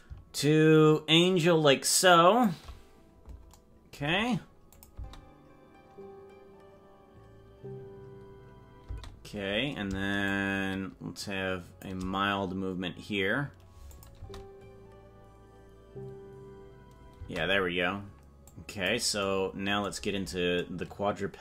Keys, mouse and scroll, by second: 0.3-2.4 shift+drag, 4.7 click, 4.9 space, 9.0 space, 10.2-11.8 shift+drag, 13.9 click, 14.1 space, 17.3 space, 18.5 click.